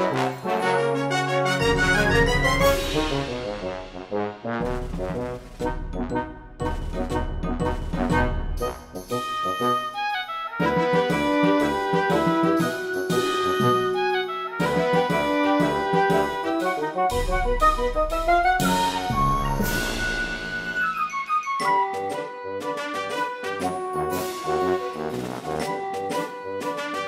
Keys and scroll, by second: 0.0-1.1 typing, 2.2 space, 2.7 space, 4.6 space, 5.9 space, 6.5 space, 7.5 space, 8.7 space, 9.7 space, 11.6 ctrl+z, 13.2 space, 13.7 space, 14.5 ctrl+z, 15.2 space, 16.3 space, 16.9 space, 17.8 space, 18.7 space, 22.8 space.